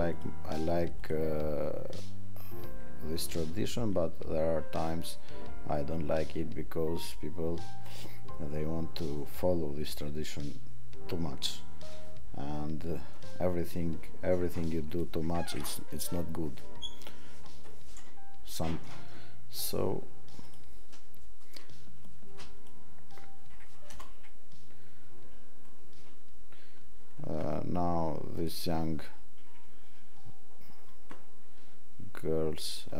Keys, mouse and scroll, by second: 2.8 click, 14.9 click, 28.3 click.